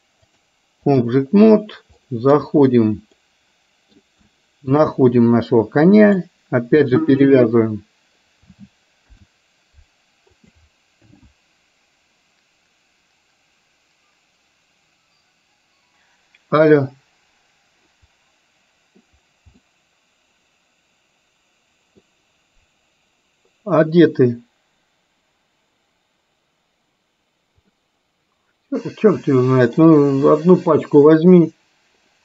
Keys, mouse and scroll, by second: 0.3 click, 2.1 middle click, 3.1-4.0 middle drag, 4.2 shift+middle click, 9.1 ctrl+p, 19.6-22.1 middle drag, 27.7-29.8 middle drag.